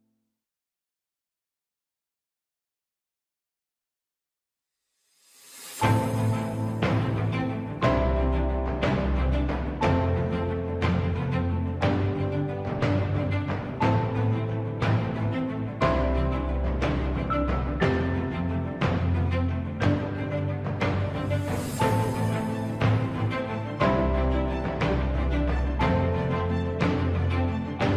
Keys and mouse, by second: 0.9 middle click, 1.9 middle click, 3.2 middle click, 5.3 alt+click, 7.3 s, 9.7 z, 10.6 z, 11.3 middle click, 12.3 middle click, 12.8 middle click, 13.8 Tab, 14.4-16.0 middle drag, 17.1 Tab, 17.7 middle click, 20.2 3, 20.3 click, 21.3 KP_3, 22.3 shift+middle click, 26.8 ctrl+click, 27.8 ctrl+click.